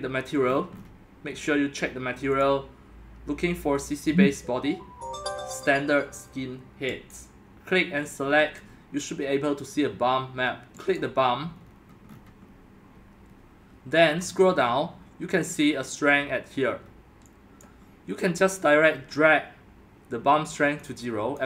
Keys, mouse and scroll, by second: 0.4-1.9 scroll down 10, 2.4 click, 7.9-9.8 scroll, 10.9 click, 11.6-13.3 scroll, 14.3 scroll, 14.5-15.4 scroll down 7, 15.4-16.8 scroll down 2, 16.8-17.7 scroll down 2, 17.7 click, 17.9-18.3 scroll down 2, 18.3-21.3 middle drag.